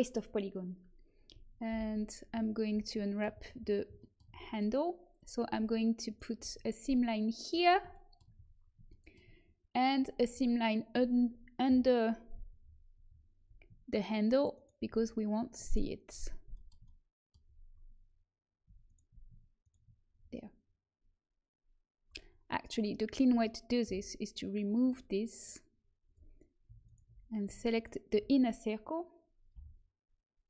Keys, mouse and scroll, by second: 1.6 alt+h, 2.6 a, 5.1-7.1 drag, 6.0 middle click, 6.0-7.9 right drag, 6.7 middle click, 7.3 middle click, 8.3 middle click, 11.6 KP_Decimal, 12.5 middle click, 14.4-18.8 middle drag, 22.5 right click, 23.8 Delete, 29.5 e.